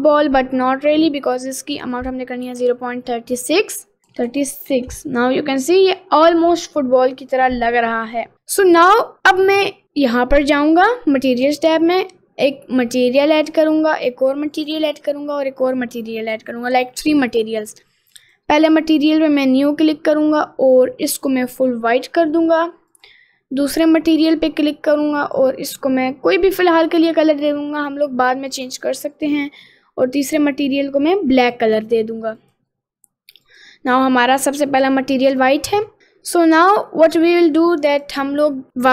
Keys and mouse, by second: 0.5 middle click, 2.1-4.9 drag, 5.3 middle click, 5.7-7.1 middle drag, 8.3 middle click, 9.2 middle click, 13.4 click, 14.5 click, 15.5 click, 18.3 click, 19.2 click, 20.9 click, 23.0 click, 24.2 click, 25.3 click, 28.5 click, 29.2 click, 30.3 click, 32.5 click, 33.5 click, 38.0 click.